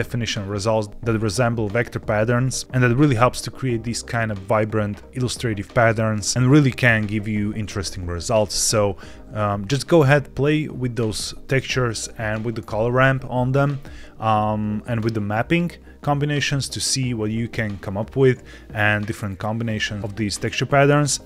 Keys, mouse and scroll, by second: 6.0 click, 9.8 click.